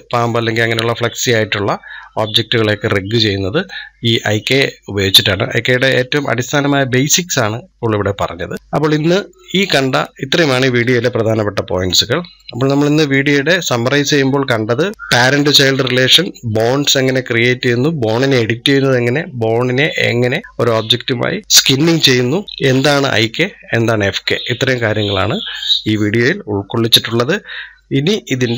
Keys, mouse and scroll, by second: 9.8-10.8 scroll down 1, 12.2-14.9 shift+middle drag.